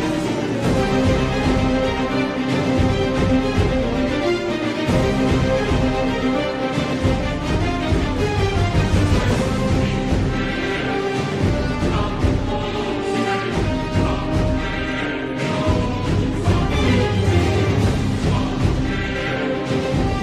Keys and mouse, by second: 5.1 z, 6.4 shift+middle click, 13.4 Tab, 16.6 Tab, 17.7 shift+middle click.